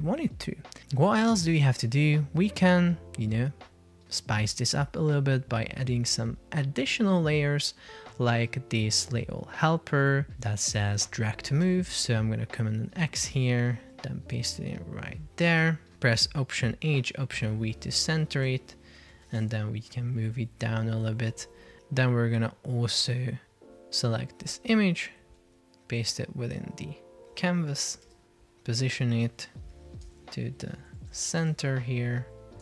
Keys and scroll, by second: 12.5 super+x, 14.0 super+v, 23.7 super+x, 26.1 super+v, 28.0 alt+h, 28.2 alt+v.